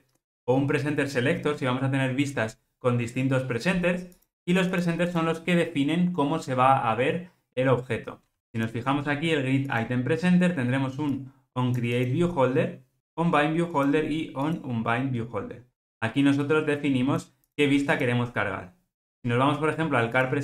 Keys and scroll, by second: 8.6 super+b.